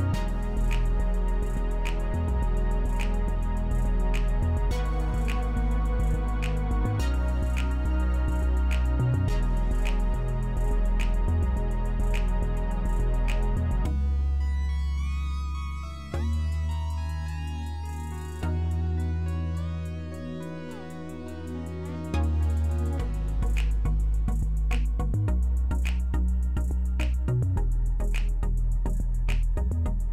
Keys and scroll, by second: 1.1 alt+w, 1.7 alt+w, 14.6 alt+w, 15.6 alt+w, 19.6 c.